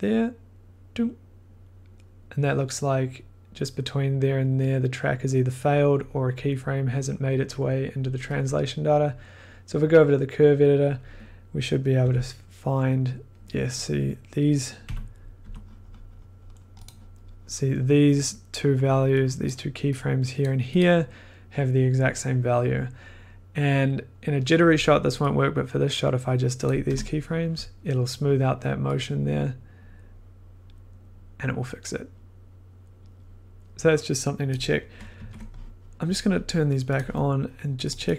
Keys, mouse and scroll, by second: 5.9 click, 6.8 click, 6.9 click, 7.0 click, 9.7 click, 10.9 click, 11.0 click, 12.0 f, 13.3 scroll, 13.3 click, 14.1 click, 15.4 typing, 15.6-16.5 scroll, 16.8 click, 20.4 click, 20.8 click, 26.6 click, 26.8 BackSpace, 28.1-31.0 drag, 34.4 click, 35.1 ctrl+z, 36.9 click, 37.9 click, 38.0 click.